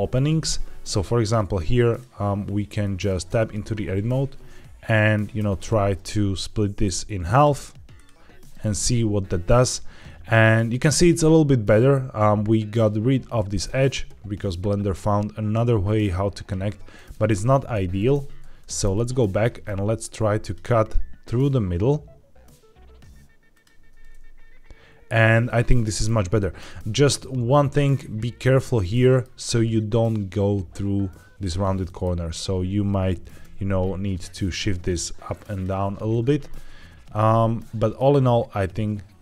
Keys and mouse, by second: 1.8 click, 2.7 middle click, 3.2 Tab, 5.3 ctrl+r, 7.8 click, 8.2 Tab, 16.8 middle click, 17.6 ctrl+z, 17.9 ctrl+z, 18.5 middle click, 19.3 middle click, 19.9 ctrl+r, 23.4 click, 23.7 Tab, 25.3-25.9 middle drag, 26.2 shift+middle drag, 28.8-29.1 middle drag, 31.7 middle click, 32.1 Tab, 33.1 g, 33.3 y, 35.4 click, 35.7 Tab, 37.0-37.8 middle drag.